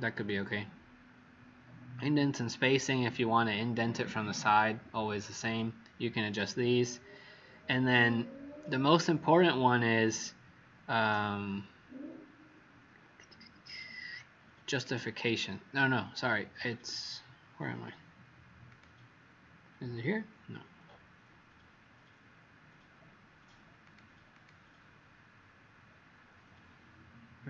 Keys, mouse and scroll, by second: 24.3 click.